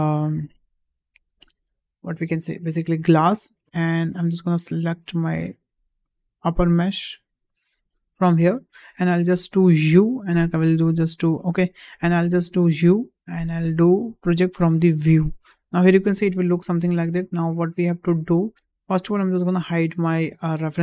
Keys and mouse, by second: 5.0 click, 6.4 click, 7.5 click, 9.8 u, 12.7 u, 18.5 Tab, 19.1 click, 20.0 h.